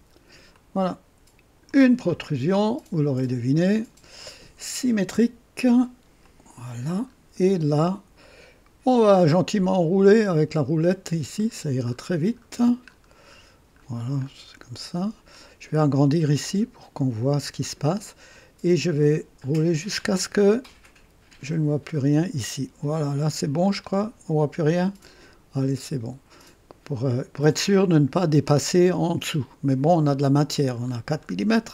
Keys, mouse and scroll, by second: 0.5-1.8 drag, 3.5 click, 6.2 click, 7.1-7.4 scroll up 1, 7.8 scroll down 2, 8.2 right click, 10.3-10.6 scroll up 1, 10.8-11.1 scroll up 1, 11.4 scroll up 1, 11.9-15.3 scroll up 7, 15.7-16.6 scroll up 2, 19.0 scroll up 1, 19.8 scroll up 1, 20.8 scroll up 1, 21.8 scroll up 1, 23.7-25.0 drag, 27.4 click, 28.5-29.9 drag, 30.8-31.7 scroll down 2.